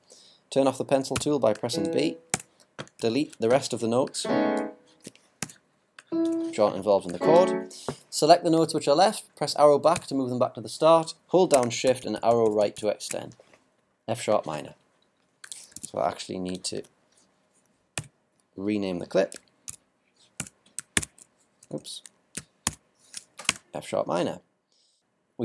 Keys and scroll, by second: 3.0 ctrl+BackSpace, 11.8 shift+Right, 16.8 super+r, 19.7 alt+4, 20.4 alt+BackSpace, 20.9 alt+3, 21.6 alt+BackSpace, 22.3 alt+BackSpace, 22.6 alt+3, 23.5 alt+Return.